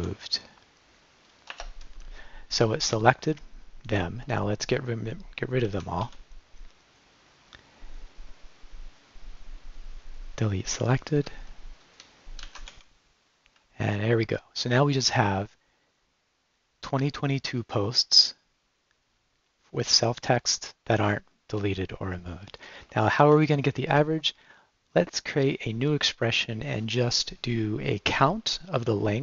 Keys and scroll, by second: 0.0-0.4 typing, 1.5 Return, 5.7 g, 6.0 d, 11.3 Left, 11.8 Right, 12.4 g, 12.7 d, 13.6 Left, 23.2 Right.